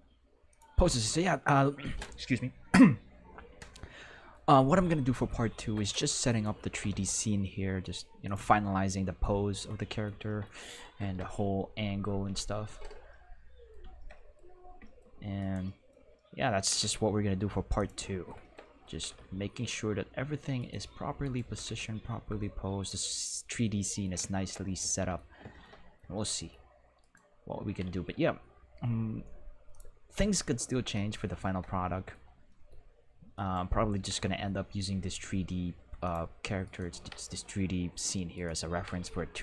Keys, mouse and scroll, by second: 0.9-1.5 shift+middle drag, 6.3 right click, 6.6 r, 6.8 x, 6.9 x, 8.2 click, 8.8 middle drag, 9.6-10.1 middle drag, 10.3 middle click, 11.0 Home, 12.2 Home, 16.6 r, 16.8 z, 17.7 click, 18.9 r, 19.1 x, 19.2 x, 20.5 right click, 21.2 right click, 21.4 g, 21.6 z, 22.9 click, 27.0 click, 27.7 r, 27.8 x, 28.0 x, 29.7 click, 30.5 middle click, 33.9 r, 34.1 x, 34.3 x, 36.0 click, 36.6 click, 37.0 r, 37.2 x, 38.7 r, 38.9 x, 39.0 x.